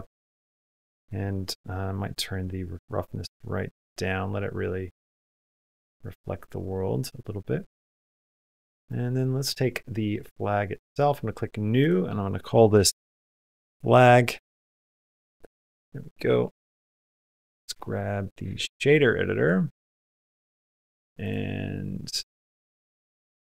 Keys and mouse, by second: 2.7-7.8 drag, 8.6 click, 10.7 click, 11.7-15.0 shift+drag, 13.3 BackSpace, 19.4-20.6 drag, 21.1 click.